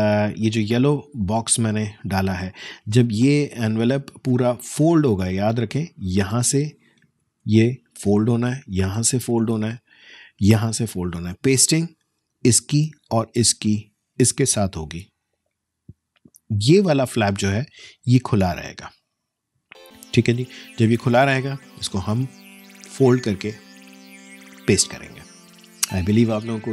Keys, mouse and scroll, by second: 2.0 alt+scroll down 1, 3.0 space, 3.2 click, 3.5 space, 5.2-6.4 alt+scroll up 1, 6.4 alt+click, 7.4 ctrl+alt+z, 9.6 alt+space, 9.8 alt+click, 10.1 alt+space, 12.8-13.4 alt+scroll down 1, 17.1 alt+scroll down 1, 17.3 alt+scroll up 1, 20.6 space, 20.9 click, 21.2 space.